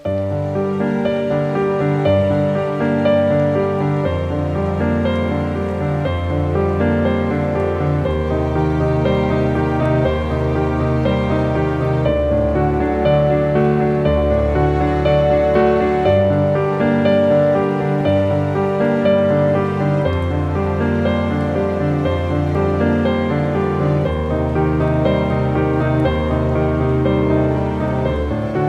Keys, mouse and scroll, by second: 1.2 shift+right click, 2.4 click, 3.2 shift+right click, 5.4 click, 5.5-12.4 drag, 12.4 ctrl+t, 13.8 right click, 14.3 right click, 15.2 click, 16.5 ctrl+t, 18.1-28.6 drag.